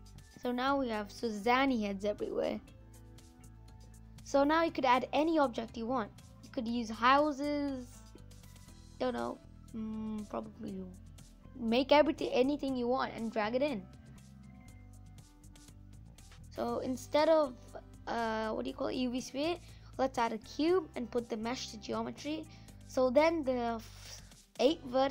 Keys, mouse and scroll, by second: 6.4-6.9 scroll down 8, 6.9-14.8 middle drag, 14.8 Delete, 21.2 click, 21.6 scroll up 2, 22.0-25.1 middle drag.